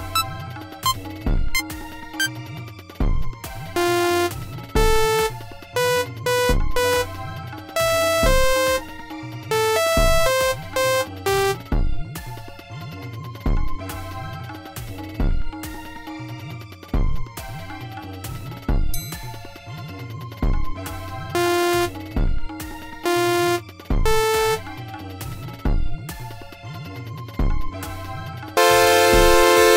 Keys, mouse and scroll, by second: 0.8 click, 1.5 click, 2.1 click, 3.7 space, 11.7 space, 14.1 g, 15.2-17.4 drag, 17.9-19.7 drag, 20.4 click, 21.3 space, 23.0 space, 24.5 space, 25.4 click, 25.6 right click, 28.0 click, 28.5 space.